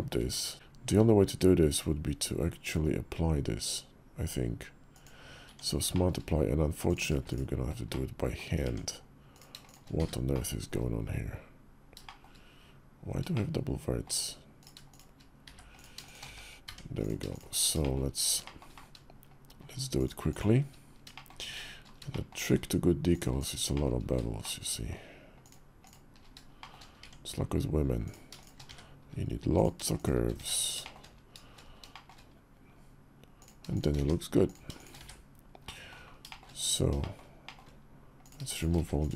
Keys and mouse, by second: 0.0 Tab, 0.5 Tab, 0.6 q, 5.3 Tab, 5.7 shift+click, 6.6 click, 7.0 shift+click, 7.7 click, 8.4 Tab, 9.4 shift+click, 9.8 1, 10.1 click, 11.8 shift+click, 13.1 shift+click, 15.2 1, 15.5 click, 15.8 shift+click, 16.0 1, 16.4 Tab, 17.6 shift+click, 18.2 shift+click, 19.7 shift+click, 20.1 shift+click, 20.9 shift+click, 21.8 shift+click, 22.9 shift+click, 24.2 shift+click, 25.2 shift+click, 25.6 shift+click, 26.3 shift+click, 26.8 Tab, 27.8 click, 28.4 1, 29.3 click, 29.7 shift+click, 30.1 1, 30.6 shift+click, 31.7 shift+click, 33.5 shift+click, 33.7 1, 34.8 1, 35.4 click, 36.0 shift+click, 36.8 shift+click, 37.2 shift+click, 38.0 click, 38.3 shift+click, 38.5 1.